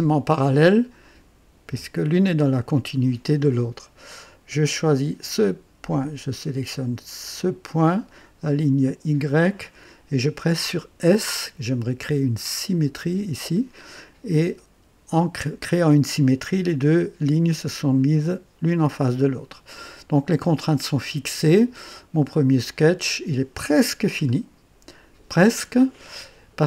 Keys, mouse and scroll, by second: 5.2 click, 7.6 click, 9.2 click, 12.9 s, 20.2-20.6 scroll down 2, 21.0 right click, 23.7 scroll up 2, 24.3-24.9 right drag.